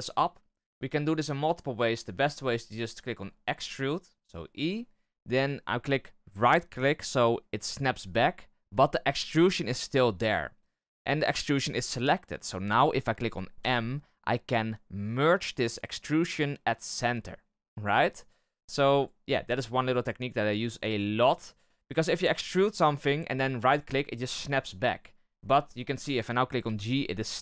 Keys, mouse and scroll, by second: 0.2-3.0 scroll up 1, 3.2 e, 13.5 m, 18.9 right click, 19.7 middle click, 20.1-20.5 scroll up 2, 20.5 shift+middle click, 20.8-22.1 scroll up 2, 22.1 e, 24.9-25.5 scroll up 4, 26.6 g.